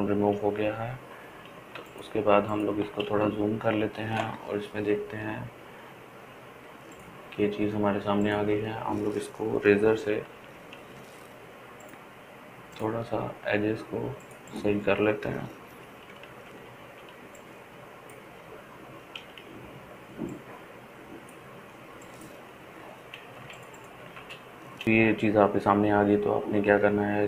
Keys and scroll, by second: 5.0 ctrl+space, 5.6 ctrl+space, 5.7 ctrl+space, 5.8 ctrl+space, 6.0 ctrl+space, 13.4 ], 13.6 ], 13.8 ], 19.3-20.4 typing, 22.4 [, 22.7 [, 23.0 [.